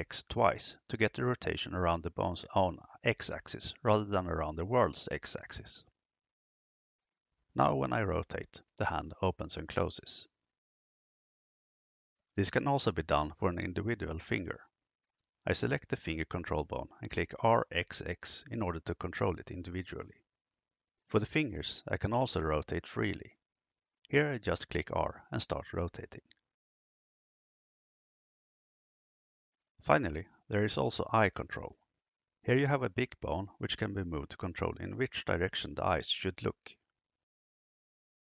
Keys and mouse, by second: 14.5 right click, 16.3 r, 16.9 x, 17.1 x, 24.4 r, 30.9 right click, 32.3 g.